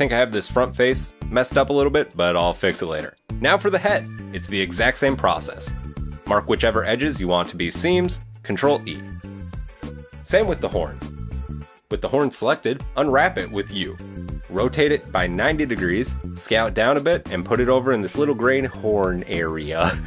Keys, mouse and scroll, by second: 3.2 right click, 3.3 Tab, 3.4 shift+middle click, 3.5 middle click, 3.8 click, 3.8 scroll up 1, 4.3 click, 4.3 right click, 4.7 shift+right click, 4.8 shift+right click, 4.9 shift+right click, 5.5 shift+right click, 5.6 shift+right click, 5.8 middle click, 6.5 ctrl+e, 8.6 shift+middle click, 9.8 scroll up 1, 9.9 right click, 10.1 shift+right click, 10.3 shift+right click, 10.3 shift+right click, 10.5 scroll up 1, 10.6 shift+right click, 10.7 shift+right click, 10.8 shift+right click, 10.9 shift+right click, 11.0 ctrl+e, 11.4 right click, 11.6 ctrl+l, 11.6 scroll down 3, 11.7 u, 12.4 a, 13.1 r, 14.2 s, 14.7-15.6 scroll up 5, 14.8 g, 15.3 shift+middle click, 15.6 shift+middle click, 15.9 s, 16.8 g, 18.9 ctrl+z, 19.4 right click, 19.7 shift+right click.